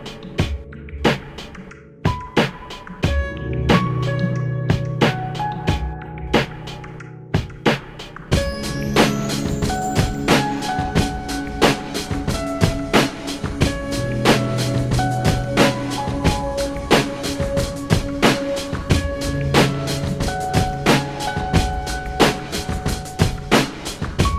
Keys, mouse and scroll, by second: 1.4 s, 3.5 click, 4.4 s, 8.1 click, 9.8-12.0 shift+middle drag, 14.9 alt+m, 17.0 click.